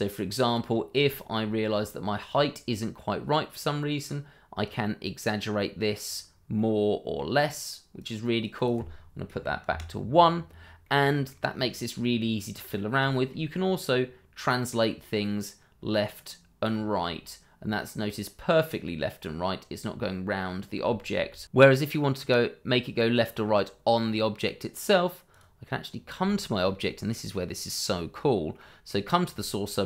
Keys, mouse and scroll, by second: 1.1 shift+middle click, 1.7 scroll up 1, 2.3 middle click, 4.6 click, 6.3 scroll down 1, 6.5 middle click, 7.9 click, 9.3 1, 9.6 Return, 10.5-10.8 scroll down 1, 10.8 middle click, 11.6-12.0 scroll down 1, 12.0 middle click, 13.0 shift+middle click, 14.6 click, 17.0 middle click, 21.1 ctrl+z, 21.7 scroll up 1, 23.3 middle click, 25.3 click, 25.9 scroll down 1, 26.2 shift+middle click, 26.6-28.2 scroll up 1, 28.2 scroll down 1, 28.5 middle click, 29.3 shift+middle click.